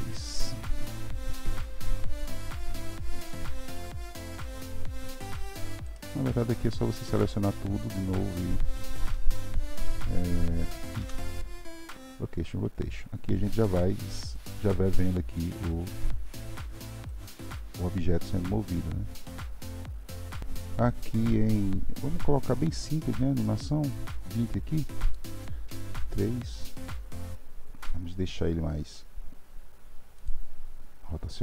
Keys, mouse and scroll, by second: 1.8 r, 4.3 click, 5.1 r, 6.5 click, 13.7-14.7 drag, 14.7-17.1 middle drag, 17.1-20.1 drag, 20.7-23.4 drag, 23.4-25.9 middle drag, 25.9 KP_3.